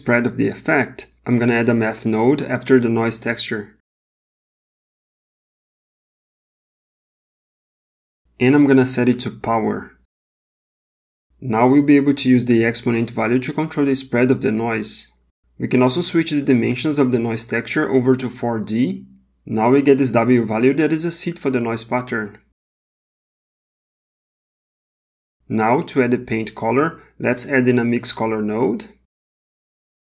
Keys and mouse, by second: 0.2 shift+a, 3.5 shift+a, 8.3-10.5 drag, 12.2-15.3 shift+drag, 16.4-18.0 drag, 21.3-23.5 drag, 23.8 space, 24.2 middle click, 25.6 click, 26.7 g, 28.3 click, 29.4 shift+a.